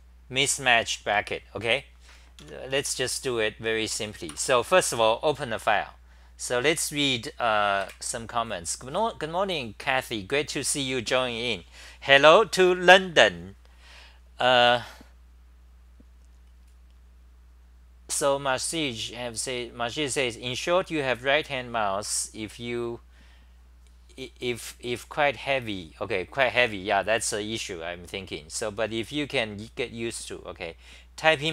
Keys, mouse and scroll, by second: 0.0-0.9 typing, 2.4 Home, 2.7 t, 2.8 t, 3.0 t, 4.3 Return, 4.9 Home.